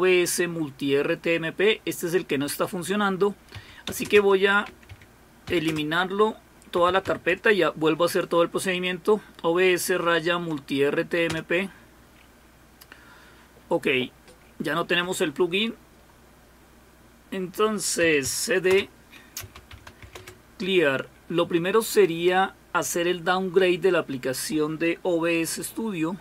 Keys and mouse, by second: 4.7-7.5 typing, 19.2-20.5 typing.